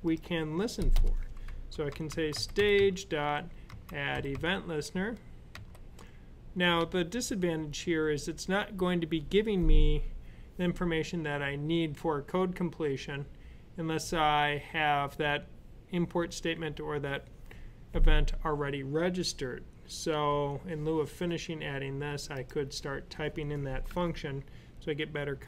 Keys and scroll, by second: 1.5-4.2 typing, 5.3 typing.